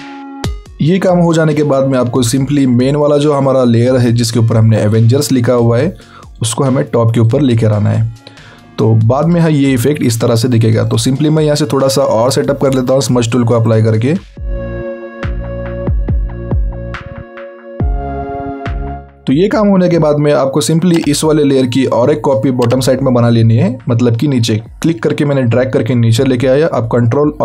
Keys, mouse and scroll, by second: 0.3 alt+scroll down 1, 8.3 alt+click, 9.7 scroll up 1, 11.0 click, 15.0 scroll down 1, 15.1 scroll up 1, 15.4 click, 15.9 scroll up 1, 16.0 click, 16.8 alt+scroll down 1, 17.2 alt+scroll up 1, 17.3 alt+scroll down 1, 17.5 alt+scroll up 2, 17.7 click, 18.6 alt+scroll down 2, 18.8 alt+scroll up 1, 18.9 alt+scroll down 1, 19.1 scroll up 1, 22.7 click.